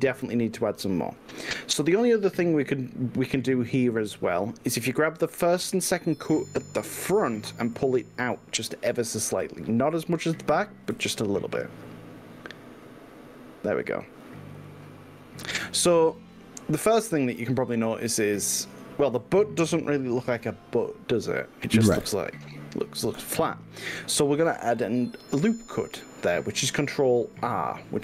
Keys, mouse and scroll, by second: 7.8-8.4 drag, 9.4 g, 11.0 y, 14.2 drag, 14.6 click.